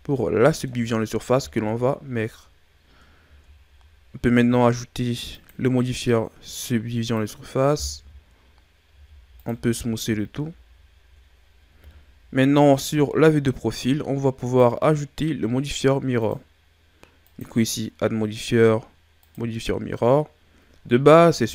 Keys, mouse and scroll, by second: 0.1-1.3 middle drag, 1.3 KP_1, 3.2 Tab, 5.3 click, 8.8 w, 10.0 a, 10.4-11.7 scroll down 6, 11.7 KP_3, 13.0-13.3 ctrl+scroll up 9, 14.4 right click, 16.1-20.2 drag, 21.3 KP_1.